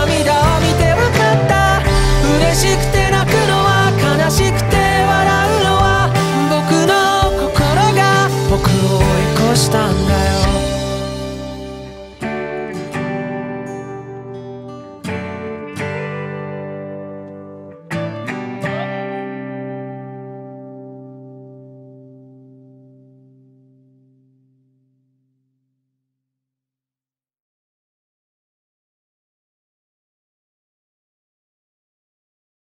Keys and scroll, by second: 3.4 ctrl+z, 4.4 ctrl+z, 4.8 ctrl+z, 6.8 ctrl+z, 13.1 ctrl+z, 14.5 ctrl+z, 16.8 ctrl+z.